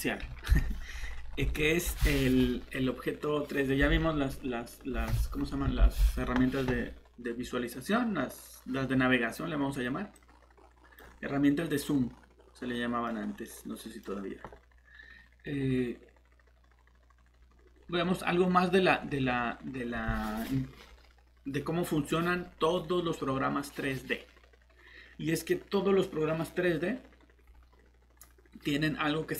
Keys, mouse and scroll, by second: 0.5 Delete, 1.0 scroll up 1, 1.5 middle click, 10.1 click, 11.7 middle click, 13.1 scroll up 1, 13.4 middle click.